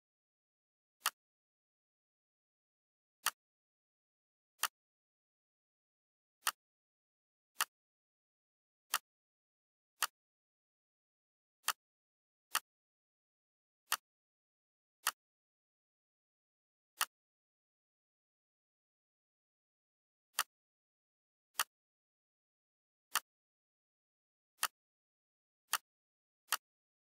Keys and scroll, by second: 1.8 g.